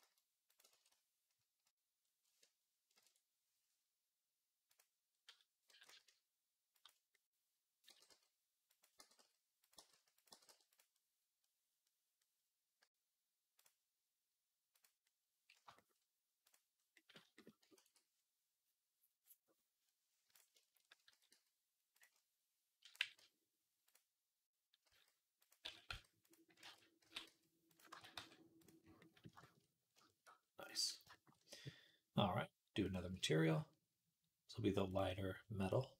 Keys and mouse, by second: 0.6 ctrl+z, 2.9 ctrl+i, 4.5 click, 5.5 g, 7.7 g, 8.8 g, 9.6 g, 10.2 g, 13.4 click, 14.6-16.4 drag, 15.5 shift+middle click, 17.6 ctrl+s, 20.4 shift+click, 20.8-28.5 drag, 20.9 s, 22.8 g, 24.7 s, 25.5 s, 26.5 ctrl+z, 26.9 s, 27.8 ctrl+a, 28.4 middle click, 28.4-35.9 right drag, 30.5 click, 32.7-34.9 drag, 32.7-34.9 middle drag.